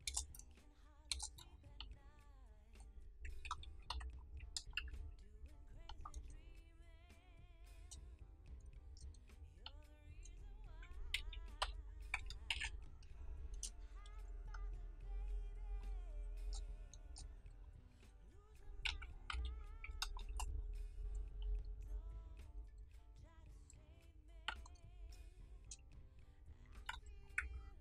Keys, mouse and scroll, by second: 0.0 Return, 1.7-3.4 drag, 3.4 ctrl+d, 4.3 ctrl+[, 4.7 ctrl+shift+y, 6.1 click, 8.4 Return, 9.6-11.0 drag, 11.0 ctrl+d, 11.5 [, 12.4 ctrl+shift+y, 14.0 click, 16.3 Return, 17.5 click, 18.8 ctrl+d, 19.2 [, 20.2 ctrl+shift+y, 21.8 click, 24.4 Return, 25.3-26.8 drag, 26.8 ctrl+d.